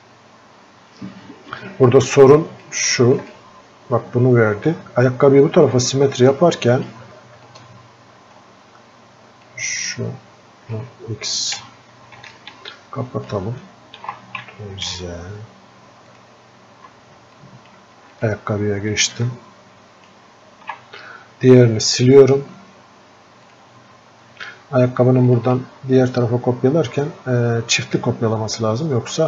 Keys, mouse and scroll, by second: 7.8-17.7 ctrl+shift+drag, 17.7-19.5 drag, 19.5-29.2 ctrl+alt+shift+drag.